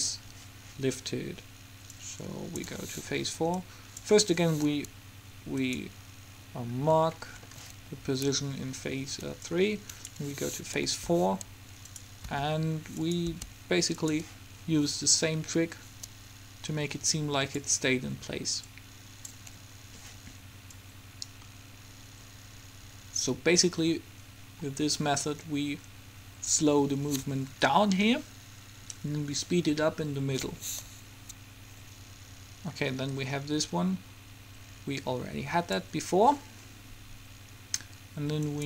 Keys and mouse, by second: 2.0-4.5 drag, 4.5-6.5 middle drag, 6.5 click, 7.3-9.5 middle drag, 9.5-11.1 drag, 11.0 g, 12.5 r, 13.5 g, 15.1-16.7 drag, 18.8-20.5 drag, 20.9 click.